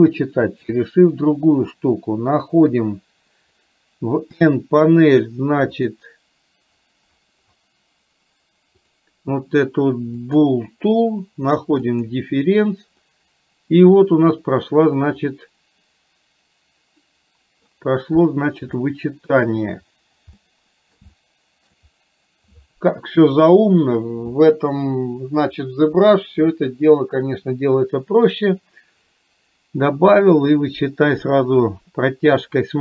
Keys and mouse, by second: 0.6 shift+click, 4.4 n, 5.8 click, 10.3 click, 12.1 click, 13.1 middle click, 15.4-17.8 middle drag, 19.0 shift+middle click, 20.5 middle click, 21.1 shift+middle click.